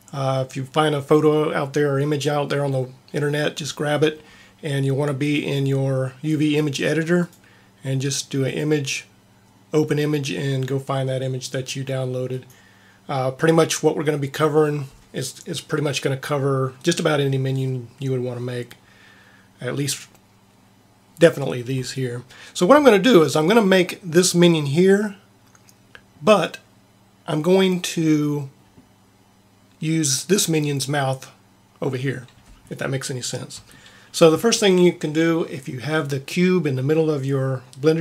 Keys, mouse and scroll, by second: 5.2-7.2 drag, 8.4-10.2 drag.